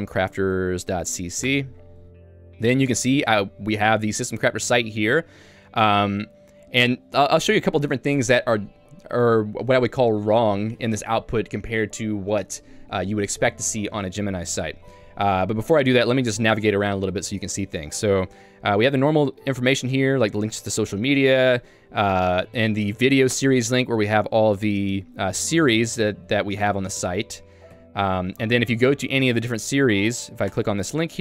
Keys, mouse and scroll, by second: 1.6 Return, 3.2 k, 5.1 j, 19.2-20.1 typing, 21.4 ctrl+u, 21.8 k, 23.3 Return, 24.6 j, 24.9 ctrl+d, 25.2 ctrl+d, 27.8 ctrl+u, 28.2 ctrl+d, 28.4-29.3 typing, 30.5 Return.